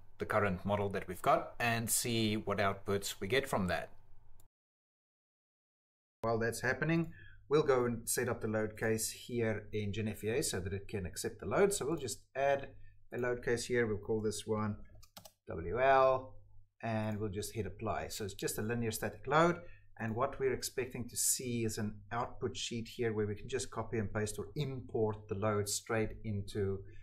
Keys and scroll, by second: 0.0-3.7 typing, 14.4-15.2 typing.